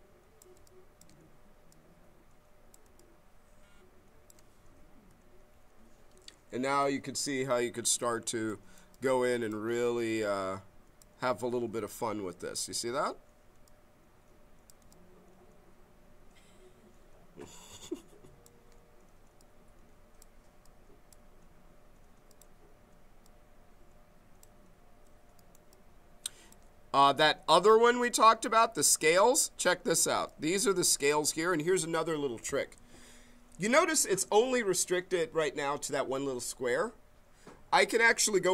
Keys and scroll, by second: 11.7 b.